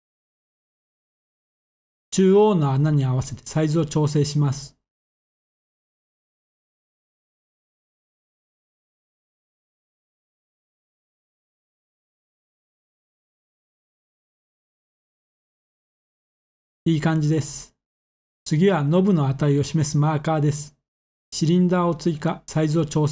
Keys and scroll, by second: 0.7-2.6 typing, 5.9 typing, 7.4-8.6 typing, 11.8 s, 13.2 typing, 16.4 7, 18.6 a, 21.8 s.